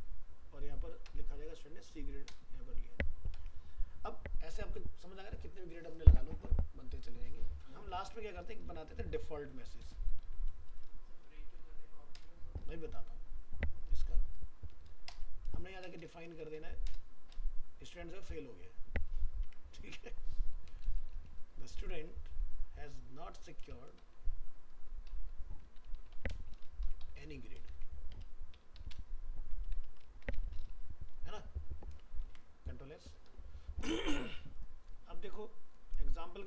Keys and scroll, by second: 20.8 ctrl+shift+Left, 32.3 ctrl+s.